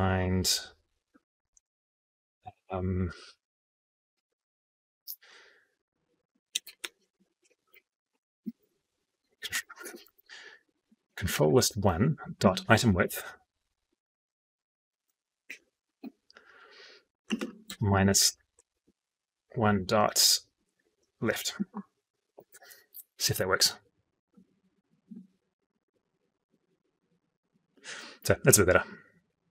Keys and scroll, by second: 9.5 ctrl+space.